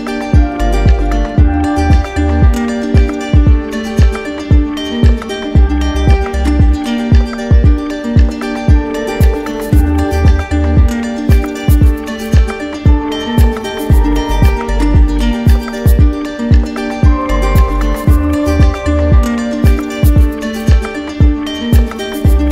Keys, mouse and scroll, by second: 0.4 alt+click, 1.3 right click, 4.7 click, 5.8 right click, 6.9 right click, 9.3 click, 10.7 right click, 12.3 click, 13.3 right click, 15.3 click, 17.7 right click, 19.2 right click, 21.0 right click, 21.4 right click, 22.0 right click.